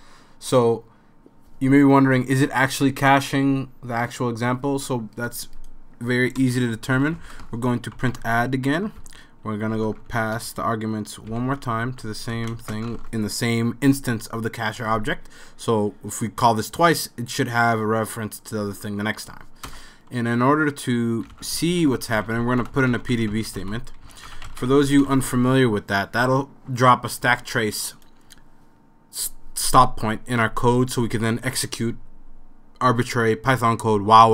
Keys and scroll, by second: 6.4 Return, 6.7-12.6 typing, 12.3 super+s, 12.6 Left, 19.7 Return, 21.0-25.4 typing, 26.7-27.4 typing.